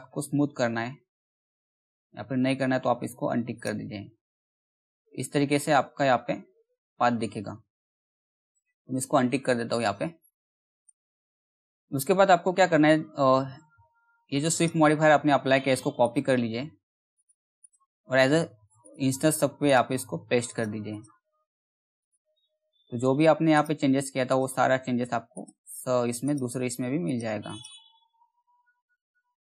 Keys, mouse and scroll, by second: 0.6 alt+middle click, 1.3-1.7 scroll down 1, 1.7 middle click, 3.1 click, 4.4 alt+middle click, 5.1 scroll down 1, 5.2-7.2 scroll up 1, 7.2 scroll down 1, 8.2 alt+middle click, 9.0-9.5 scroll down 1, 9.5 middle click, 10.3 click, 10.8 middle click, 11.3-11.8 scroll down 1, 11.8 middle click, 14.1 click, 14.1 click, 15.6 right click, 16.7 click, 17.6-18.1 scroll up 1, 18.4 click, 19.2 right click, 20.0 click, 23.1 right click, 23.8 click, 25.8 right click, 26.6 click, 27.6 scroll down 1, 28.0 middle click, 28.0 middle click, 29.3 click.